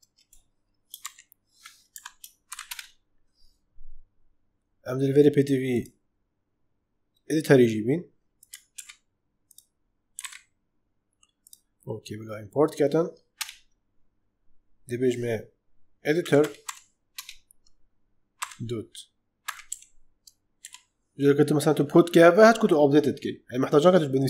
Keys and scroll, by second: 0.0-0.9 typing, 1.8 Right, 2.4 shift+[, 2.6 Return, 8.6 ctrl+c, 10.1 ctrl+v, 13.3 Return, 15.9-17.1 typing, 18.3-20.5 typing.